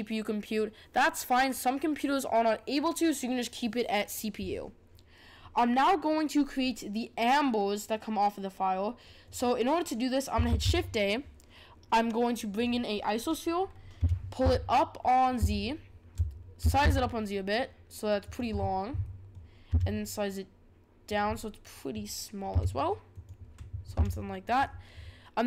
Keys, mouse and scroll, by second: 5.3-7.2 scroll down 2, 7.2-8.4 scroll down 1, 9.2 click, 10.4 shift+a, 13.6-14.0 scroll down 3, 14.0 g, 15.5-16.6 shift+middle drag, 16.6 s, 18.5-19.0 scroll down 6, 19.0-19.7 middle drag, 19.7 s, 21.3-22.5 middle drag, 22.5 g, 23.9 s.